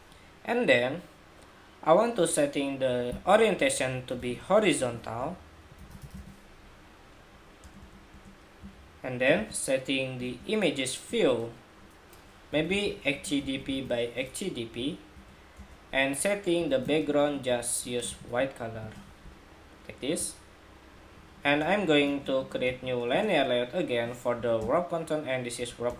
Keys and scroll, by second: 14.2 Return.